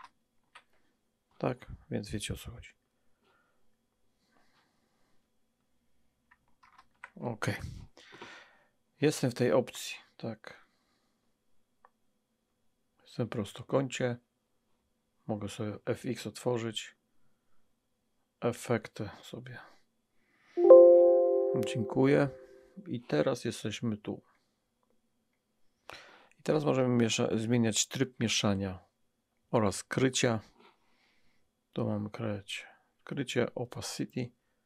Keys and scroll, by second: 6.7 alt+BackSpace.